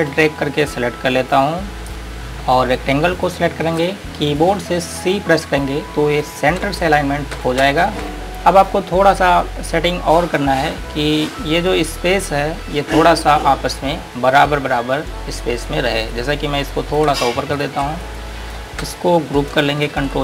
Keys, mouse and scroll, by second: 3.5 shift+click, 8.3-11.9 scroll up 1, 15.5-16.3 scroll up 1, 16.3 click, 17.8 shift+click, 18.2 click.